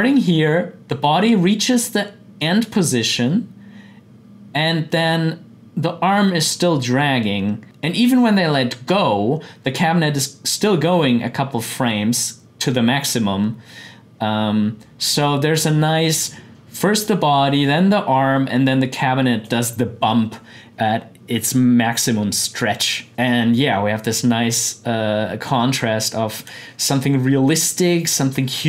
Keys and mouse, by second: 23.1-28.6 drag.